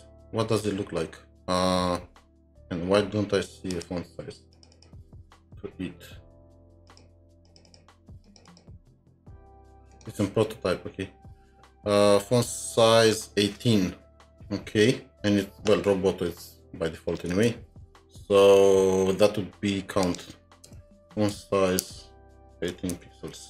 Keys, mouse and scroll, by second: 4.7 double click, 5.7-7.2 alt+scroll up 2, 7.5 alt+scroll up 1, 7.5 double click, 7.7 double click, 17.2 click, 17.3 alt+Tab, 20.7 Return, 21.8 Return, 22.7-23.4 typing.